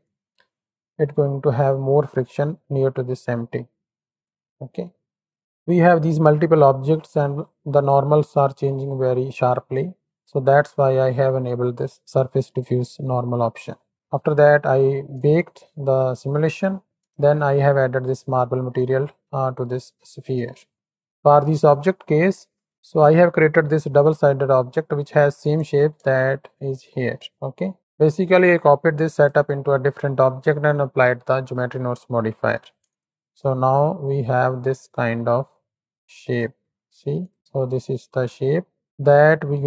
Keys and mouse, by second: 0.0-1.6 drag, 4.2-5.4 drag, 13.6 middle drag, 13.9 Tab, 15.4 ctrl+shift+click, 16.4 middle click, 17.3 ctrl+shift+click, 18.9-19.4 drag, 26.1 ctrl+shift+click, 27.5 click, 28.4-31.9 drag, 32.8 ctrl+shift+click, 36.2 click, 37.1 click, 37.5 middle click, 38.2 middle click.